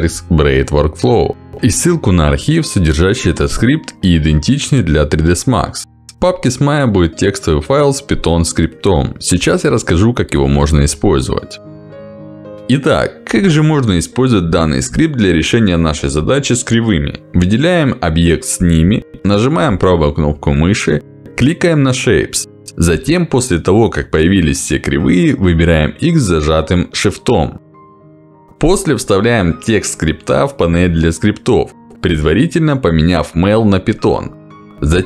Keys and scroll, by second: 32.7 Escape.